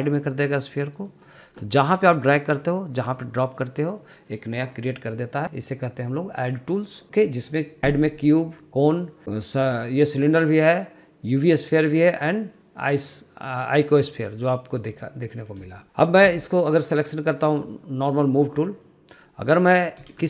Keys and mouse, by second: 2.2-2.5 middle drag, 2.9 middle click, 3.6 middle click, 4.5 middle click, 5.5-14.8 drag, 16.0 middle click, 18.0 click, 19.4 middle click, 20.0 middle click.